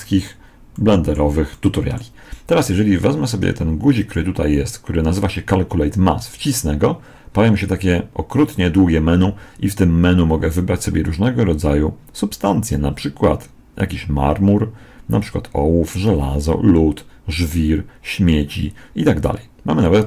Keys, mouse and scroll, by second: 6.1 click.